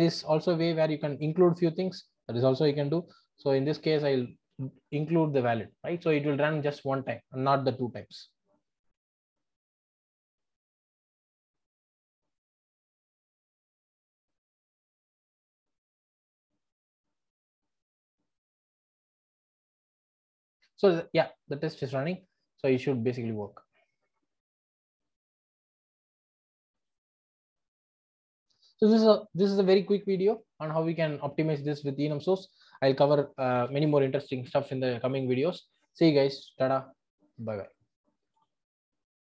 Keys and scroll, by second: 4.0 Return, 25.8 super+`.